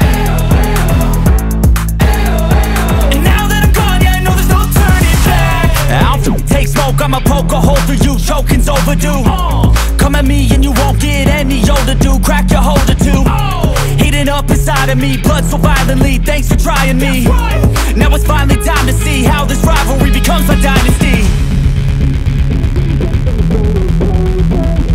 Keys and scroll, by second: 0.6 [, 5.1 5, 5.3 [, 7.0 [, 8.0 [, 9.2-12.9 typing, 14.4 super+l, 21.9 super+z, 24.3 super+i.